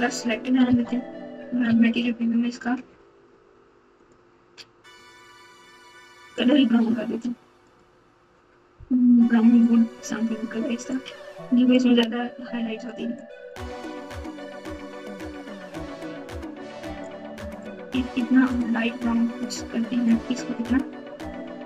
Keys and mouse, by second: 0.6 Tab, 1.6 z, 4.0 click, 4.9 click, 6.3 click, 7.7 click, 10.8 click.